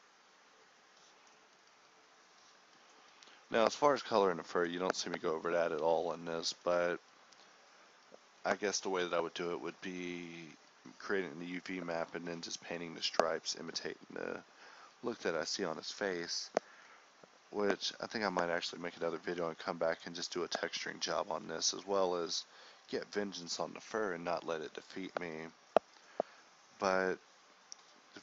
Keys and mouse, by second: 1.7 f, 2.1-9.6 drag, 12.4 click, 12.6 f, 13.0-13.7 drag, 16.2 a, 16.6 a, 17.0-21.9 drag, 23.4 click, 23.9 KP_0, 27.7 click.